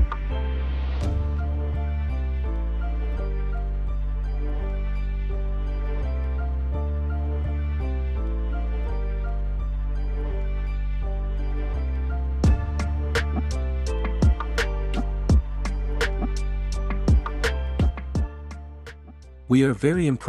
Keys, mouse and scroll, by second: 1.0 ctrl+c, 2.8 ctrl+c, 2.9-3.8 drag, 4.5-6.2 drag, 6.2 ctrl+a, 6.5 ctrl+v, 8.2-8.7 drag, 8.8 click, 9.9-10.4 drag, 10.5-11.0 drag.